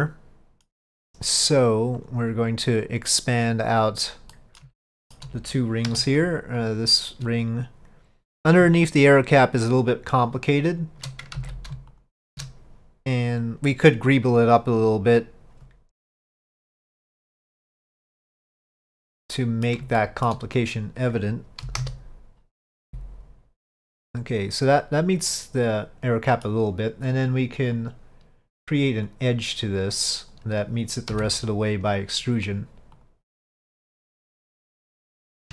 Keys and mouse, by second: 0.2-2.1 middle drag, 2.1 click, 3.8 click, 4.4 middle click, 4.9 shift+middle click, 6.7 click, 7.4 alt+click, 10.4 alt+shift+click, 11.5 ctrl+z, 12.0 alt+shift+click, 18.7 click, 19.3 middle click, 20.1 shift+middle click, 21.7 KP_5, 22.9 s, 25.4-26.6 middle drag, 27.9 click, 29.2-30.4 drag, 32.5 click, 33.1 click, 34.2 alt+click.